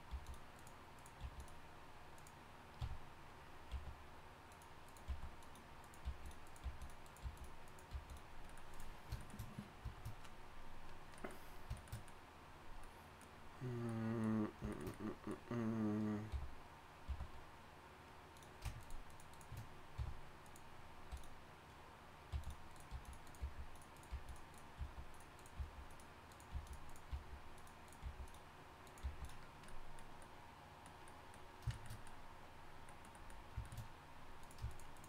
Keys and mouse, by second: 0.1 g, 1.2 g, 2.8 f, 3.7 g, 5.1-7.9 typing, 7.2 click, 16.3 f, 17.0 g, 20.0 f, 22.3-29.0 typing.